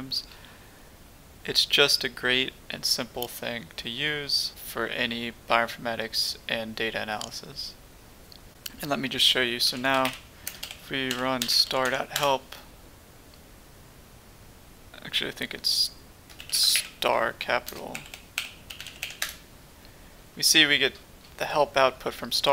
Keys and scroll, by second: 9.4-12.3 typing, 16.1-20.6 typing.